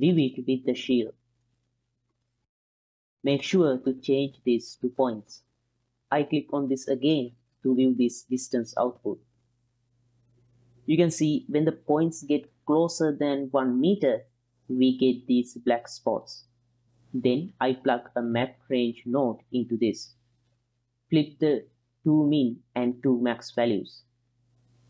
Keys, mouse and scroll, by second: 0.2 shift+x, 0.8 ctrl+shift+click, 1.6 ctrl+shift+click, 2.6 click, 4.0-5.5 drag, 7.2 ctrl+shift+click, 8.2-9.0 middle drag, 9.7-11.0 drag, 11.3 middle click, 12.5-14.8 drag, 15.2 middle click, 16.5-16.8 ctrl+middle drag, 17.2-20.4 drag, 20.7 ctrl+shift+click, 21.1-22.0 drag, 23.3 click, 23.9 click.